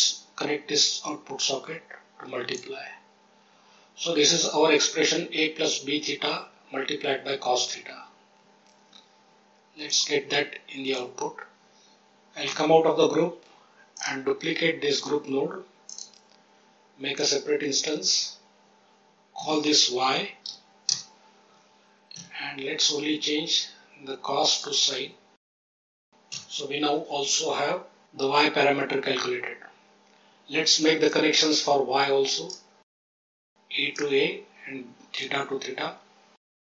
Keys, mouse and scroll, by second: 0.7-2.5 drag, 9.8 click, 12.5 Tab, 13.9 click, 14.9 shift+d, 15.8 click, 17.1 click, 19.3 F2, 22.1 Tab, 24.4-25.9 drag, 26.3 Tab, 31.0-32.4 drag, 33.1-33.9 drag, 35.1-36.4 drag.